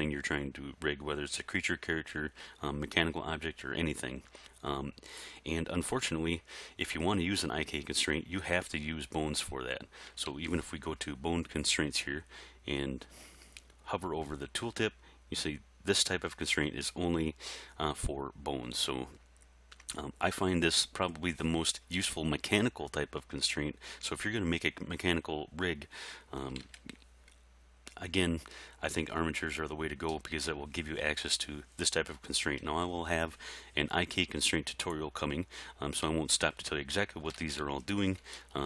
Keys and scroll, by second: 10.3 alt+a, 26.7 alt+a, 37.4 alt+a.